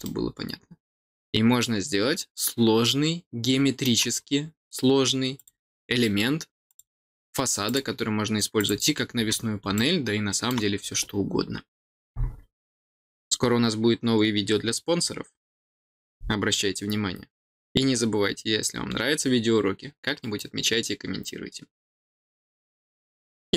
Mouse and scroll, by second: 0.0-3.8 middle drag, 5.3 click, 6.6 click, 7.6 click, 8.5 click, 9.7 middle click.